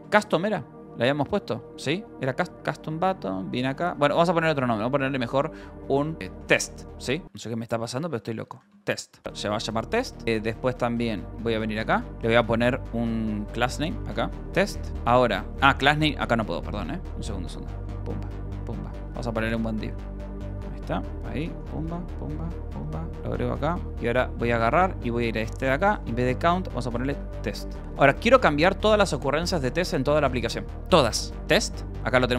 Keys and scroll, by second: 0.0 Escape, 1.5 ctrl+s, 1.6 shift+;, 2.0 Return, 2.8-4.6 typing, 3.1 Return, 6.2 t, 6.6 Escape, 7.1 0, 9.2 shift+;, 10.5 j, 11.3 Return, 11.9 j, 13.0-28.9 typing, 15.1 Return, 31.0-32.1 typing.